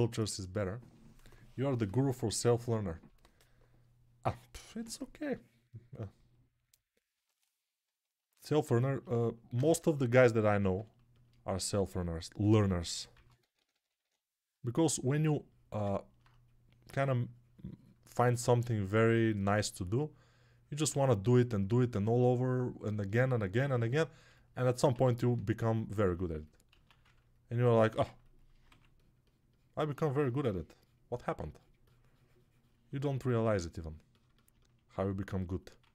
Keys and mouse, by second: 9.8-12.6 alt+shift+drag, 12.6-23.0 right drag, 13.0-13.9 typing, 15.7-23.0 alt+drag, 15.7-23.0 alt+middle drag, 26.9 alt+q, 28.5 z.